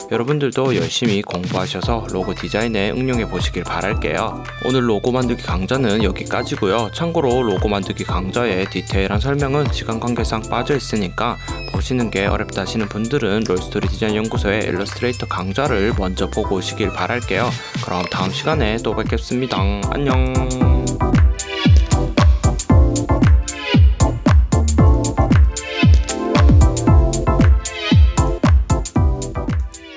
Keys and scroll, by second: 1.3 Tab, 2.9 super+0, 3.9 super+=, 7.7 super+y, 10.4 super+y, 12.3 super+-, 13.3 v, 13.6 Tab, 14.9 super+0, 15.5 space, 16.3 space, 17.3 super+-, 17.9 space, 18.6 v.